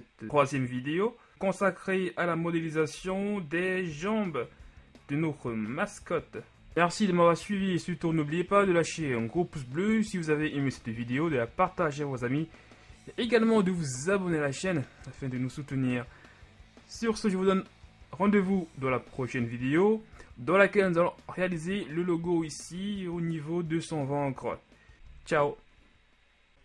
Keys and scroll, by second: 0.3 shift+Tab, 1.3 g, 3.3 KP_1, 4.1 Tab, 4.8 a.